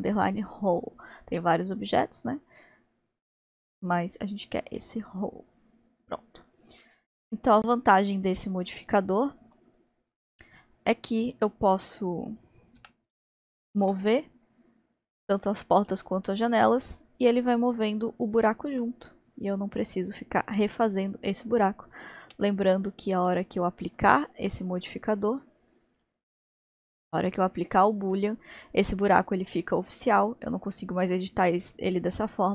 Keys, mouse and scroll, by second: 5.6-6.2 scroll down 3, 6.4 click, 6.8-9.7 middle drag, 9.7 click, 12.8 g, 22.9-23.3 drag, 23.3-25.7 middle drag, 25.7 click, 28.1-31.2 middle drag.